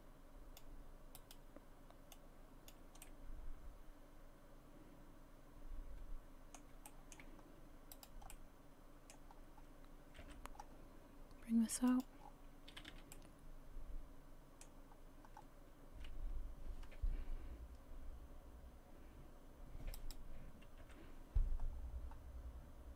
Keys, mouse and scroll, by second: 1.2 right click, 2.1 click, 3.0 middle click, 6.9 shift+middle click, 7.4-7.9 scroll up 1, 7.9 right click, 8.3 middle click, 9.4-10.1 scroll down 1, 10.2 g, 12.2 scroll down 4, 12.8 a, 12.9 a, 13.1 middle click, 14.9-16.1 scroll up 3, 20.0 right click, 20.8 g.